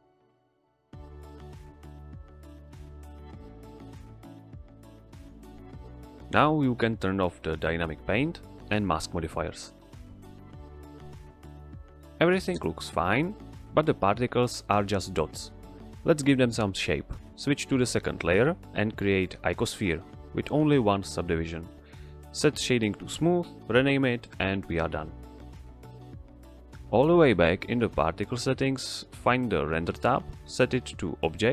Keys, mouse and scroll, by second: 1.8 click, 5.4 click, 9.6 click, 15.4 click, 17.6 click, 18.5 shift+a, 19.5 click, 21.1 t, 21.7 click, 22.2 t, 22.7 z, 23.0 click, 24.3 typing, 24.6 Return, 26.7 click, 30.0 click.